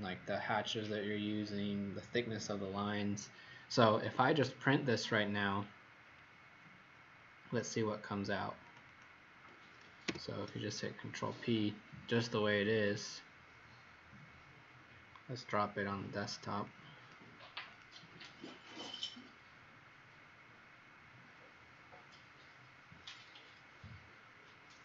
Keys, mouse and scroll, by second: 5.1 scroll down 1, 7.2-8.6 scroll up 1, 8.6 click, 8.9 click, 10.0 ctrl+p, 12.8 click.